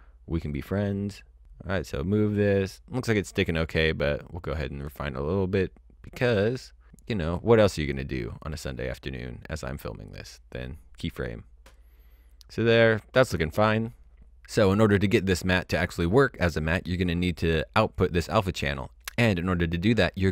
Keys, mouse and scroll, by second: 0.3 click, 14.4 click.